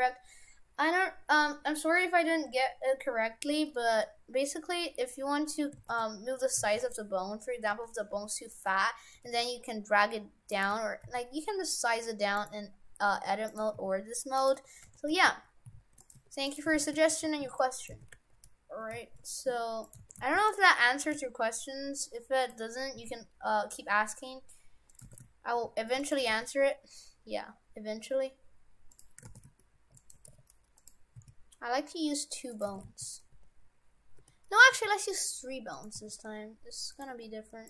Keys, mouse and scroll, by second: 3.8 middle click, 5.8 shift+f, 7.7 Tab, 8.1 g, 8.7 Tab, 9.2 g, 10.7 Tab, 11.0 s, 13.1 Tab, 13.5 right click, 13.8 s, 14.5 Tab, 14.9 shift+f, 16.2 Tab, 16.5 right click, 16.7 shift+f, 16.9 Tab, 17.8 right click, 17.9 shift+f, 19.9 right click, 20.0 shift+f, 20.8 Tab, 21.1 g, 23.0 s, 25.1 shift+f, 26.2 g, 29.4 shift+f, 30.2 g, 31.1 s, 32.7 shift+f, 33.3 Tab, 34.2 Tab, 34.7 g, 36.0 s, 37.1 Tab.